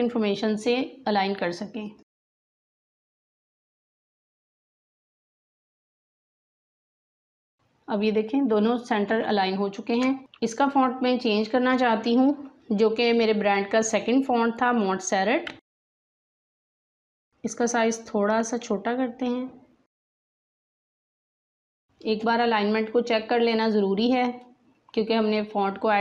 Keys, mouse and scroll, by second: 1.3 click, 2.2-5.8 drag, 6.3 click, 9.1 space, 9.3 click, 9.6 space, 10.2 click, 15.2-16.8 typing, 17.2-24.2 drag.